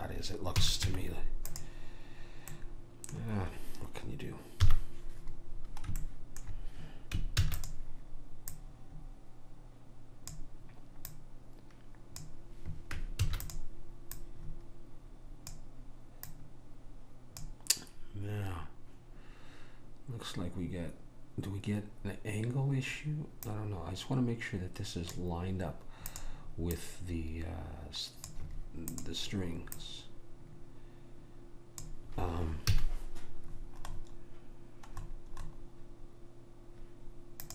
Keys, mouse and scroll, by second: 0.7 a, 1.0 Tab, 4.7 KP_1, 7.6 shift+d, 8.6 click, 11.2 click, 13.3 shift+d, 14.2 click, 16.4 click, 26.2-28.8 drag, 29.0-31.7 drag, 32.8 a, 33.7 middle click, 35.1-37.5 middle drag.